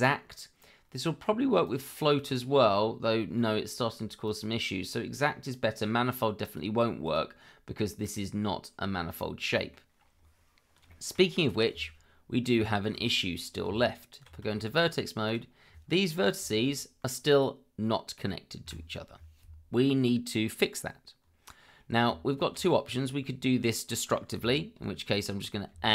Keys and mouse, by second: 1.6 click, 2.7-3.1 middle drag, 4.2 click, 6.4 click, 7.0 click, 8.0 click, 9.2-9.7 middle drag, 10.9 shift+middle drag, 12.7 shift+middle drag, 13.6 Tab, 14.5 shift+middle click, 15.2 click, 16.4 g, 18.6 Escape, 22.1 Tab, 25.7 a.